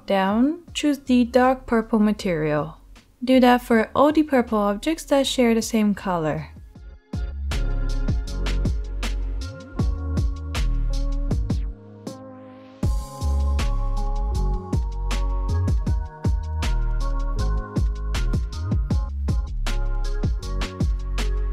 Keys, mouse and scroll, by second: 3.7-5.3 middle drag, 5.3 click, 9.4-10.5 alt+middle drag, 10.5 click, 11.0 middle click, 11.4-13.2 drag, 13.2 middle click, 13.5 click, 14.2 middle click, 14.4-15.0 drag, 15.0 middle click, 15.3 click, 15.9 middle click, 16.2 click, 16.7 middle click, 17.1-20.8 drag, 18.6 alt+h, 20.8 middle click, 21.0-21.5 drag.